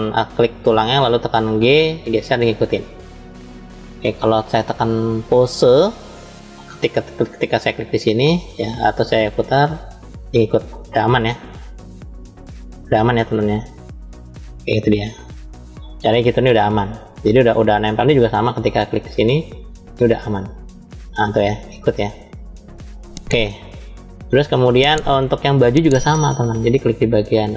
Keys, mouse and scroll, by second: 0.0 drag, 0.6 click, 1.4 g, 3.2 right click, 4.3-5.5 drag, 6.4-7.7 drag, 9.3 click, 15.1 ctrl+z, 15.9 click, 16.7-17.7 middle drag, 19.0 click, 20.1 click, 22.5 ctrl+z, 23.1-24.2 middle drag, 24.4-25.0 scroll down 2, 25.0 middle click, 26.0 scroll up 2.